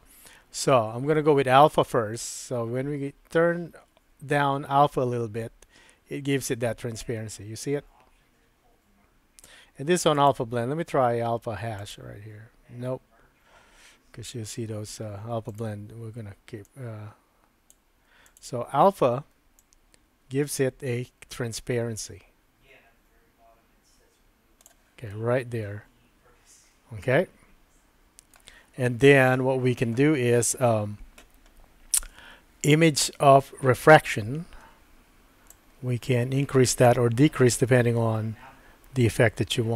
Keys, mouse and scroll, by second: 2.5-9.5 drag, 10.3-12.6 drag, 15.5-18.4 drag, 19.6-24.7 drag, 25.1-28.4 middle drag, 35.5-39.7 drag.